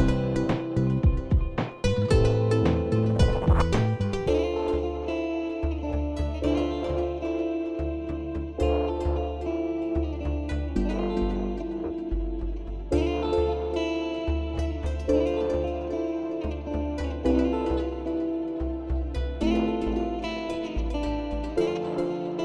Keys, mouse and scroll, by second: 2.8 click, 4.4 click, 4.8 click, 4.9 click, 5.0 click, 5.1 click, 5.2 click, 5.6 click, 5.7 click, 5.8 click, 5.9 click, 6.0 click, 6.1 click, 6.1 click, 6.4 click, 6.5 click, 6.6 click, 6.7 click, 6.9 click, 7.2 click, 7.4 click, 8.1 click, 8.2 click, 8.3 click, 8.7 click, 8.8 click, 8.9 click, 9.1 click, 9.2 click, 9.4 click, 9.9 click, 10.7 click, 10.7 click, 10.9 click, 11.3 click, 11.4 click, 11.5 click, 11.6 click, 11.7 click, 11.7 click, 11.8 click, 12.0 click, 12.2 click, 12.7 click, 12.7 click, 12.8 click, 12.9 click, 12.9-13.2 scroll, 13.2 click, 13.4 click, 13.5 click, 13.7 click, 14.0 click, 14.1 click, 14.3 click, 14.4 click, 14.5 click, 14.7 click, 15.1 click, 15.2 click, 15.3 click, 15.7 alt+scroll, 18.2 click, 20.3 click.